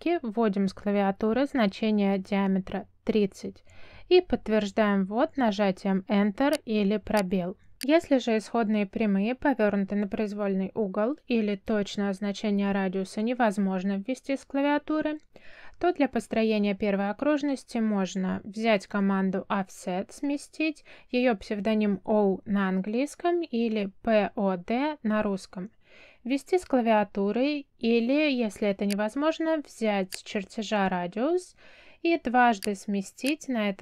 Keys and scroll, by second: 0.1 F10, 2.4 3, 4.8 Return, 24.3 o, 25.1 space.